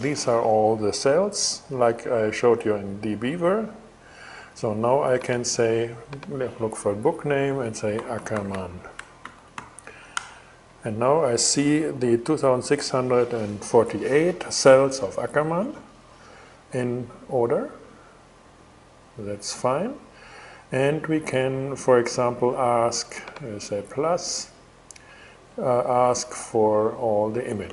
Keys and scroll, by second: 7.1-9.4 typing, 9.7 Return.